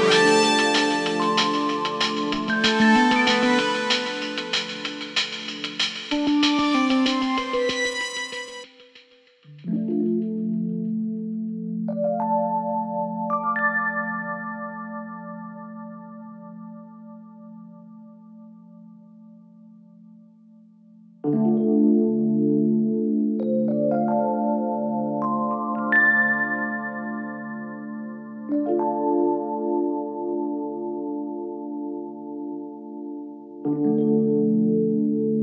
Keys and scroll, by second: 2.9 4, 6.4 2, 6.9 f, 9.1 4, 9.8 1, 10.2 ctrl+F1, 20.3 4, 29.7 4, 30.8 3, 32.0 4, 33.7 3.